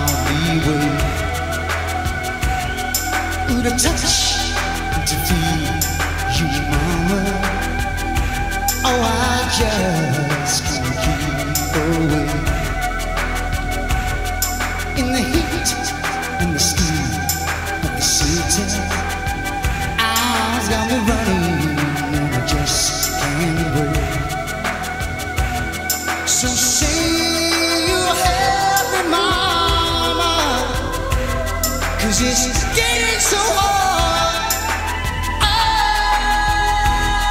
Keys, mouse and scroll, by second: 3.6 click, 7.0 Tab, 8.8-21.3 drag, 18.0 3, 25.0 e, 28.2 s, 32.6 Tab, 36.2 Tab.